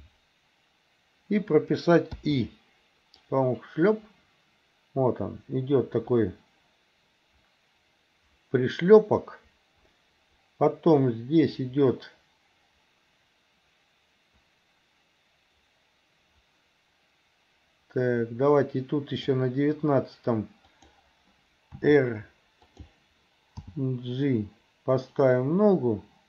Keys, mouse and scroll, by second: 2.2 i, 3.3-19.4 drag, 20.7 click, 21.7 r, 23.7 g.